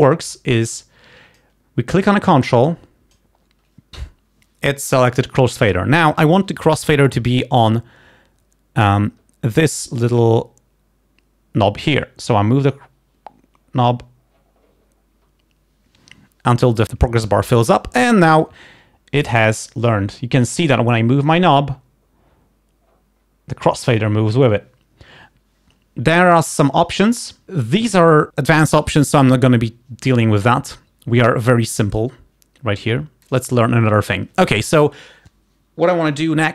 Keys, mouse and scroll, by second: 0.7-1.8 drag, 2.4 click, 33.3 click.